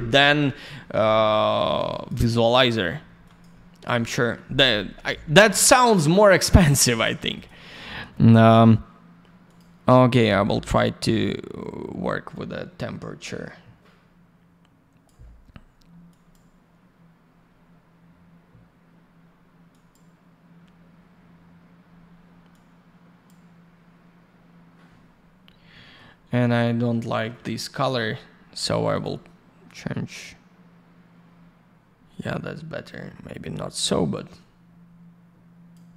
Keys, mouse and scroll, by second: 1.5 alt+middle click, 1.7 alt+я, 1.9 click, 2.0 click, 2.2 click, 2.3 double click, 3.5 middle click, 3.9 alt+middle click, 4.4 middle click, 4.7 F4, 5.0 middle click, 5.4 alt+я, 5.6 click, 6.4 alt+middle click, 6.9 middle click, 7.1 middle click, 7.3 click, 7.4 double click, 9.4 click, 9.5 click, 10.4 click, 16.0 click, 19.7 click, 22.5 click, 25.7 middle click, 26.1 scroll down 1, 26.4 alt+middle click, 27.8 click, 27.9 click, 28.9 click, 29.0 click, 29.6 click.